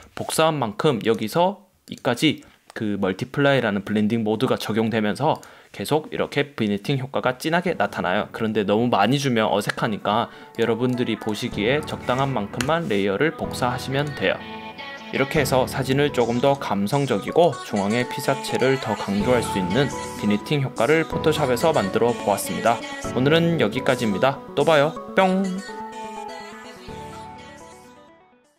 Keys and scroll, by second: 12.8 BackSpace.